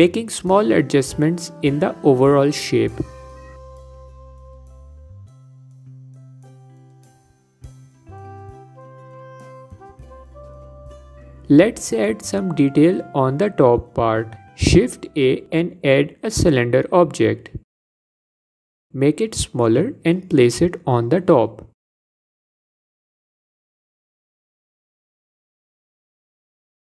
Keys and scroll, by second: 13.7 shift+a.